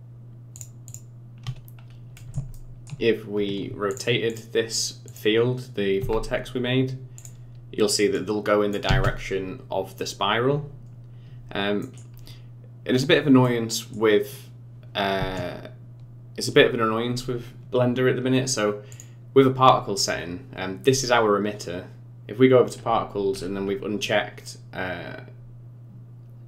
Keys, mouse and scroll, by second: 1.4-1.8 scroll down 2, 1.8 scroll up 2, 2.2 middle click, 2.5 shift+middle click, 3.9 click, 4.3 click, 5.1 click, 6.0 r, 8.2 click, 8.9 space, 10.5-10.9 scroll down 3, 11.8 middle click, 12.1-12.9 scroll down 2, 12.9-13.4 scroll up 3, 13.4 middle click, 14.2-15.2 scroll down 2, 15.2 space, 18.9 click, 22.6-23.3 scroll down 11, 23.3-26.0 scroll up 7.